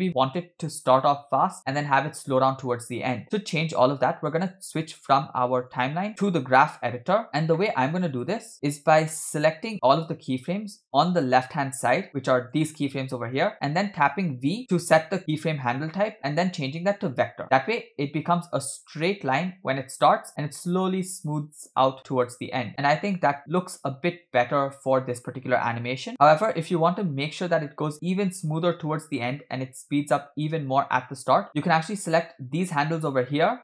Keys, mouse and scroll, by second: 0.9-1.6 drag, 4.1 click, 5.7-7.0 drag, 7.3-7.9 scroll down 4, 7.5-7.9 middle drag, 7.9-8.9 scroll up 1, 8.9 scroll up 2, 10.0-10.9 drag, 10.9 scroll down 3, 12.1-12.6 drag, 14.1 v, 23.6 click, 24.1 space, 31.5 drag, 32.2-32.7 drag.